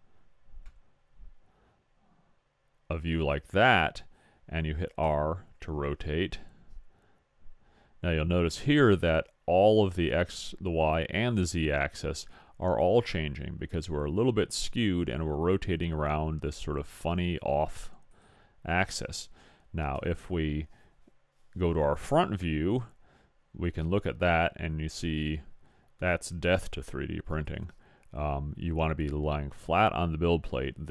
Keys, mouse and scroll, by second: 5.0 r, 20.0 KP_1, 22.3-24.2 middle drag.